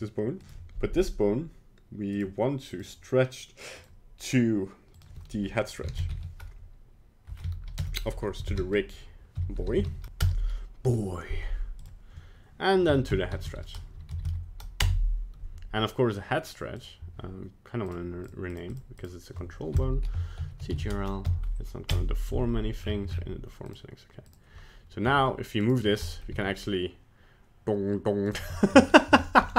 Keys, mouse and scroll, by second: 0.4 right click, 2.1 click, 2.6 click, 4.9 click, 11.8 click, 14.2 Down, 16.9 right click, 17.9 click, 18.3 click, 18.5 click, 18.7 click, 19.0 click, 22.8-23.7 scroll down 11, 23.7 click, 23.7-24.3 scroll down 4, 24.3 click, 25.1 g, 25.8 scroll down 3, 26.1 middle click, 26.3 g, 28.6 shift+middle click, 28.9 scroll up 2, 29.3 shift+middle click.